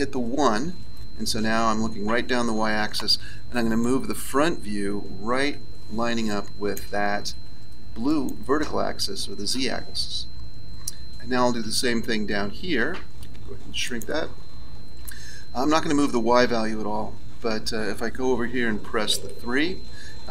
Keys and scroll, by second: 0.6 KP_1, 18.4 KP_3, 19.1 KP_3.